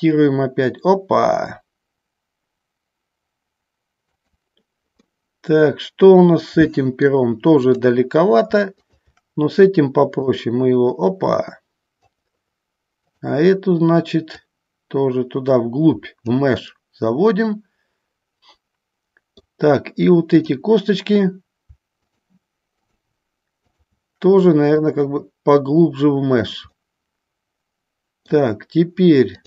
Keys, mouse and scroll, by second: 4.2 click, 5.2-7.3 middle drag, 7.7 click, 8.9 shift+click, 10.5-12.2 drag, 13.2 click, 14.6-16.5 drag, 17.0-19.6 middle drag, 22.1 shift+click, 23.0 shift+click, 25.1-26.6 drag, 26.8-28.5 middle drag.